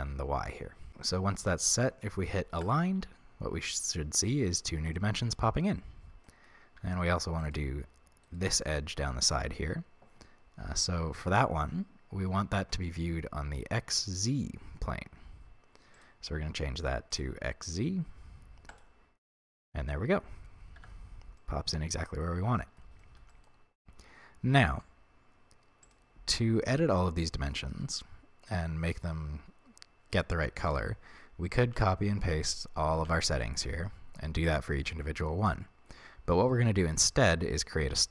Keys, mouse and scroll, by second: 0.8-2.6 middle drag, 2.6 click, 3.8-7.4 middle drag, 6.7 a, 7.4 right click, 8.2 shift+right click, 15.9-19.6 drag, 19.8-25.8 middle drag, 20.7 Tab, 25.8 click, 27.3-28.5 middle drag, 28.5 click, 29.2 scroll down 1, 30.7 ctrl+c, 31.6 ctrl+v, 36.5-38.1 middle drag.